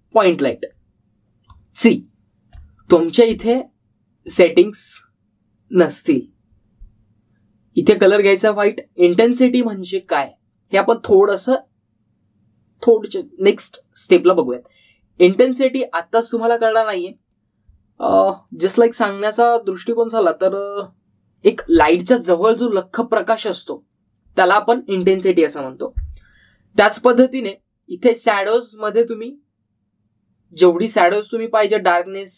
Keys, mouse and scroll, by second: 2.5-3.7 click, 28.1 click.